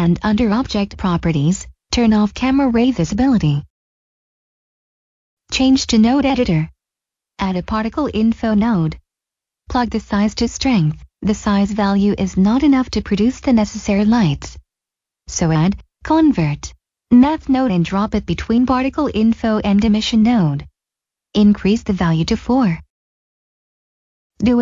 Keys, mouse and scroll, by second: 4.2 scroll down 1, 4.9 click, 5.5 click, 5.6 middle click, 6.6 click, 7.0 click, 7.9 right click, 8.1 click, 14.6 middle click, 17.3 click, 21.0 click, 22.7 4, 23.0 Return, 23.8 scroll down 1.